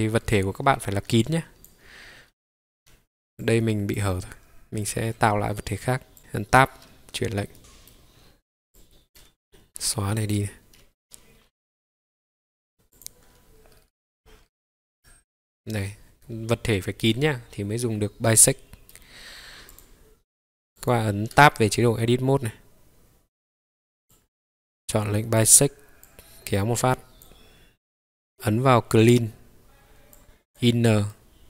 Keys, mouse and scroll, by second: 0.2 scroll up 1, 1.2 ctrl+click, 4.8-6.2 scroll down 2, 6.2 Return, 6.2 click, 6.9 click, 7.5-7.9 middle drag, 8.3-8.8 scroll down 1, 8.8 click, 10.2 Delete, 10.2 click, 10.8 shift+a, 13.7 scroll up 2, 14.0-14.4 scroll down 1, 15.0-18.9 middle drag, 15.0 scroll up 1, 19.7 click, 20.8 click, 21.3 Tab, 24.1-25.5 drag, 26.0-27.2 drag, 27.9 click, 30.2 click, 31.1-31.4 middle drag.